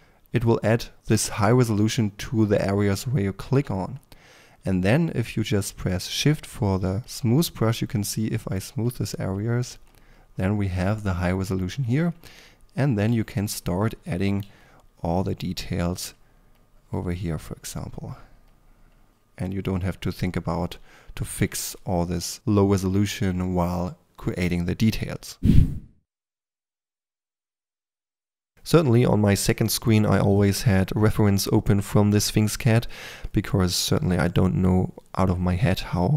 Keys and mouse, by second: 3.3-13.8 drag, 13.1 f, 14.1 f, 14.4 f, 15.5 f, 16.1-16.5 drag, 18.5-22.3 drag, 21.6 f, 25.6-26.7 typing, 25.7 click, 26.8-27.3 drag, 27.3 middle drag, 27.5 click, 28.1 f, 28.2 3, 28.9 click, 29.5-31.5 typing, 30.5 click, 30.8 click, 31.1 click, 32.6-33.0 drag, 33.0-36.1 typing, 33.7 click, 34.7 click, 35.1-35.9 drag, 36.0-36.1 drag.